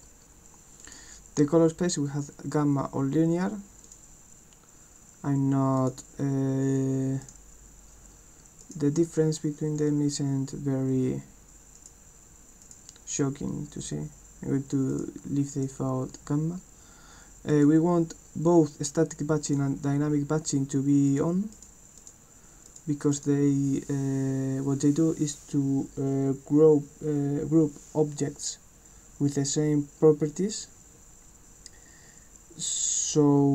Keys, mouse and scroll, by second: 0.8 click, 3.8 click, 5.8 click, 7.2 click, 8.6 click, 11.8 click, 12.6 click, 14.9 click, 15.5 click, 17.6 click, 19.5 click, 21.1 click, 21.5 click, 22.0 click, 22.7 click, 23.1 click.